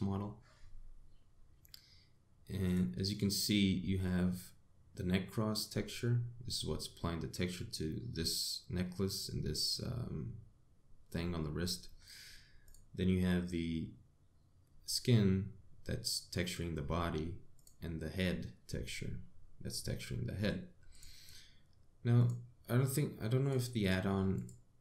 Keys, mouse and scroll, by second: 3.3 click, 3.7 click, 13.3 click, 18.2 click, 21.6 click, 22.8 click, 24.4 click.